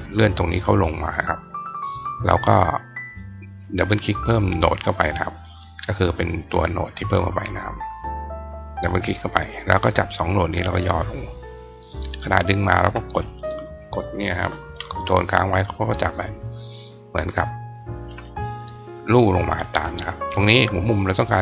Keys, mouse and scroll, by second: 1.5 click, 2.4 click, 4.6 click, 4.8 click, 7.9 click, 8.2 click, 9.3-10.2 drag, 11.0-17.8 drag, 20.9 click, 21.2 click.